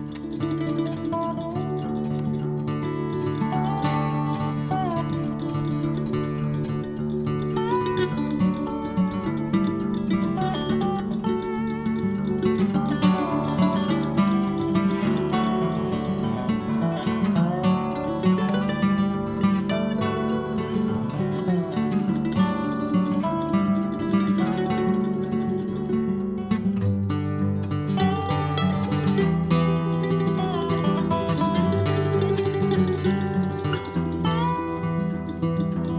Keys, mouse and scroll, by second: 1.0-2.5 drag, 2.9 n, 4.1 click, 4.8 click, 5.9 click, 6.9 n, 8.0 click, 8.7-10.9 right drag, 11.8-13.2 drag, 13.2-16.4 scroll up 55, 16.4 click, 17.5-17.9 scroll up 2, 17.9 click, 18.7 click, 19.2-20.3 middle drag, 20.3 KP_1, 20.9-24.3 drag, 24.3-25.9 middle drag, 26.4 KP_1, 27.1-32.7 drag, 32.7-34.1 middle drag, 34.1 KP_1, 35.0-35.9 drag.